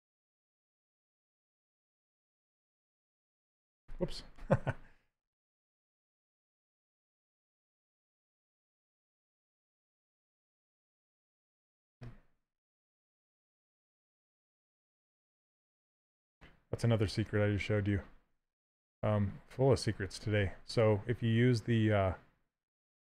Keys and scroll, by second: 4.1 ctrl+z.